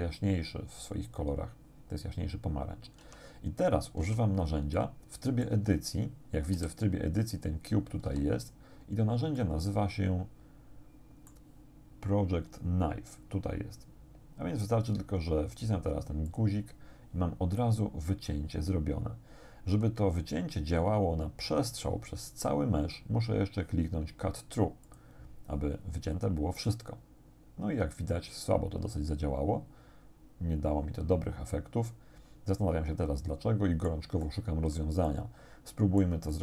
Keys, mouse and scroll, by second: 3.1 Tab, 4.1 Tab, 4.8 click, 5.6 Tab, 6.5 a, 8.1 z, 9.4-11.5 drag, 16.3 click, 24.9 click, 26.7-34.1 drag, 34.3 click, 35.1-36.2 drag, 36.3-36.4 drag.